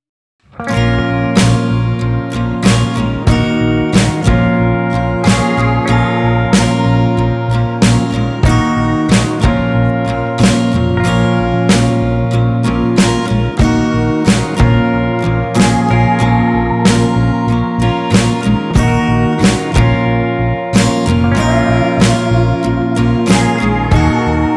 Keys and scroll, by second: 3.0 ctrl+t.